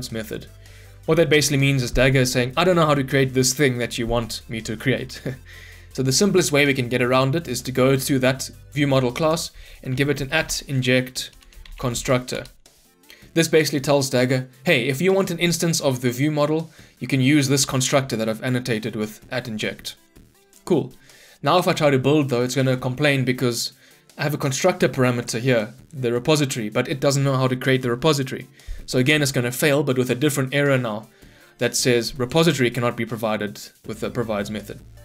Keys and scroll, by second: 7.7 ctrl+b, 11.3 Return, 21.7 ctrl+F9.